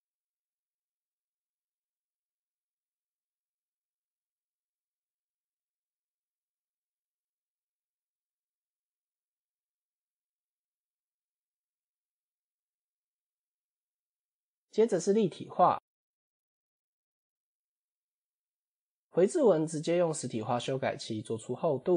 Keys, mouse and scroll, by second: 1.7-2.7 drag, 3.1 ctrl+a, 4.6 alt+g, 5.6-6.6 drag, 7.5-8.5 drag, 9.5-14.1 drag, 16.3 click, 18.0 click, 19.9 click, 21.1-21.9 drag.